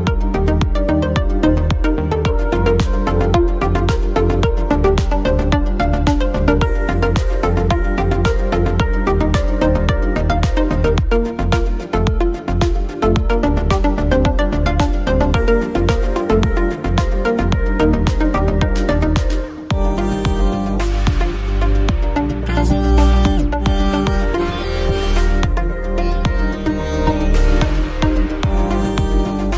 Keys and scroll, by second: 12.0 ctrl+z, 20.1 ctrl+z, 24.0 ctrl+t.